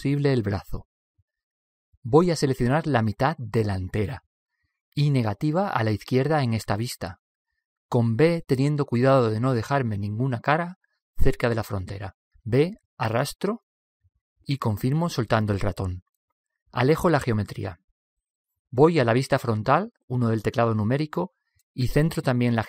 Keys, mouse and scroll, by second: 1.0-3.7 middle drag, 5.3-7.2 middle drag, 10.5 b, 13.0 b, 17.8-20.3 middle drag, 19.4 KP_1, 20.7 KP_1, 21.5-22.6 middle drag.